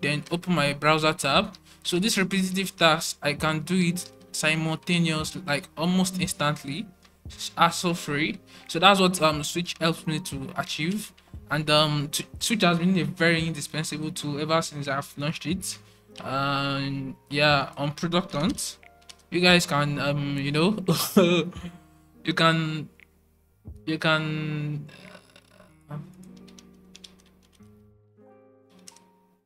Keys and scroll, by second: 0.2 alt+super+1, 1.4 alt+super+2, 1.8 alt+super+3, 2.1 alt+super+1, 2.4 alt+super+2, 2.7 alt+super+2, 3.1 alt+super+3, 3.4 alt+super+1, 3.7 alt+super+2, 4.0 alt+super+1, 4.3 alt+super+3, 4.6 alt+super+1, 4.8 alt+super+2, 5.3 alt+super+2, 5.6 alt+super+3, 6.0 alt+super+1, 6.3 alt+super+2, 6.6 alt+super+1, 6.9 alt+super+3, 7.4 alt+super+1, 7.8 alt+super+3, 8.3 alt+super+1, 11.6 alt+super+1, 16.1 Right, 18.0-19.8 typing, 21.7-23.8 typing, 26.0-29.1 typing.